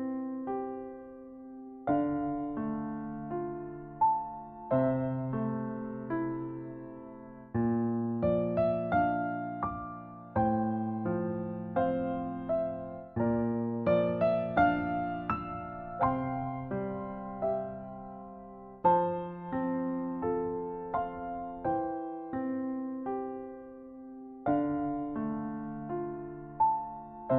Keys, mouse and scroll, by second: 1.9 b, 4.1 b, 7.8 Delete, 9.9 KP_7, 11.3 KP_1, 13.5 b, 18.7 b, 20.4 b, 22.5-23.2 scroll up 2, 23.2 b.